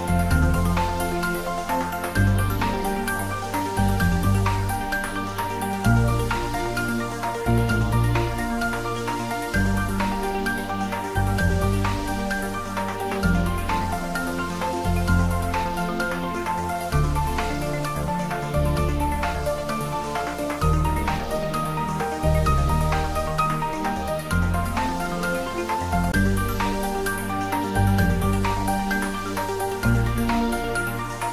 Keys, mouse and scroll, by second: 2.5 ctrl+z, 4.0 click, 5.1 Tab, 7.2 Tab, 7.5 click, 10.1 Tab, 11.5 click, 14.2 shift+click, 18.2 click, 21.6 click, 24.3 click, 29.5 scroll up 1.